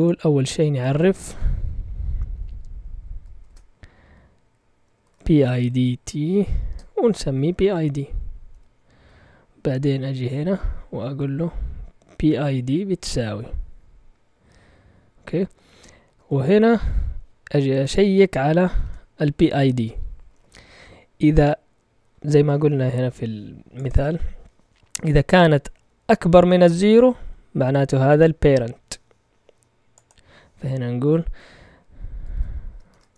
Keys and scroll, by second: 0.3 Left, 0.4 Left, 0.5 Left, 0.7 Left, 0.9 Left, 1.0 Left, 3.4 o, 4.7-13.1 typing, 15.1 typing, 17.7-18.7 typing, 20.0-20.9 typing, 32.2 shift+Tab, 32.8 {.